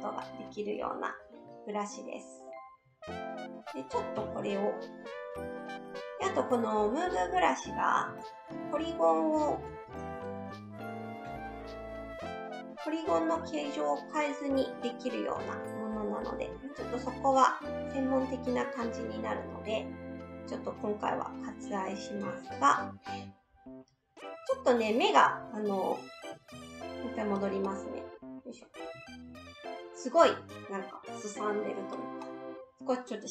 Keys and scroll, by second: 3.7 s, 4.2 s, 11.2 s, 26.5 ctrl+z, 26.9 ctrl+z, 27.0 ctrl+z.